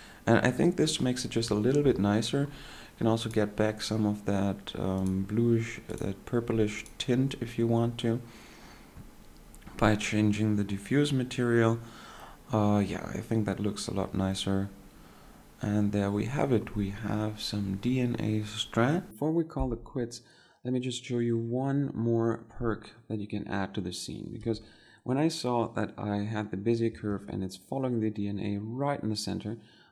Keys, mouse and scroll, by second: 25.4 2, 28.1 shift+1.